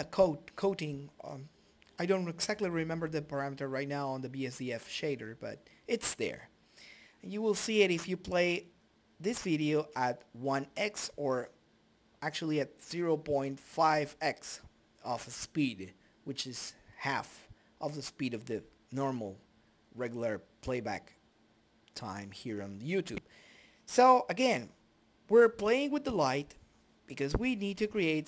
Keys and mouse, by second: 0.2-1.5 drag, 5.1 click, 7.1 click, 8.7 click, 9.6 click, 10.8-16.5 drag, 17.8 click, 18.8 click.